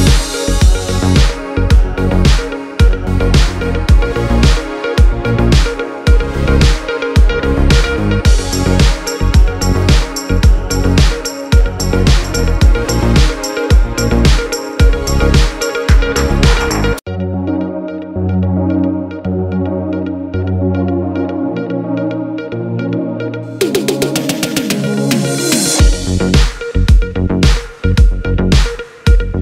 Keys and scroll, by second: 25.7 space.